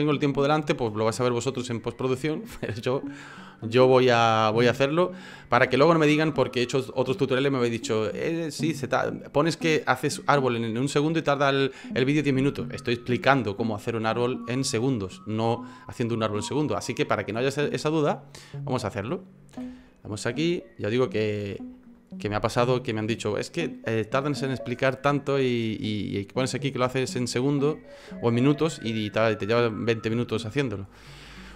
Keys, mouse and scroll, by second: 5.7 space, 18.6 right click, 19.6 Delete, 20.1 right click, 20.4 Delete, 20.7 right click, 21.5 Delete, 25.4 middle click, 27.1 shift+middle click.